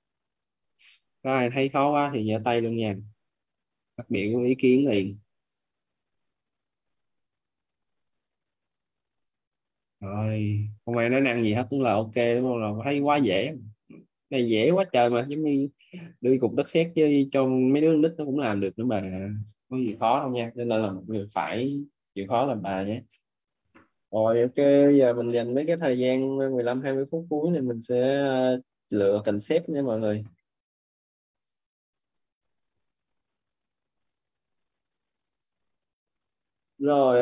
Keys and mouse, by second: 6.8 click, 14.3 right click, 31.7 click.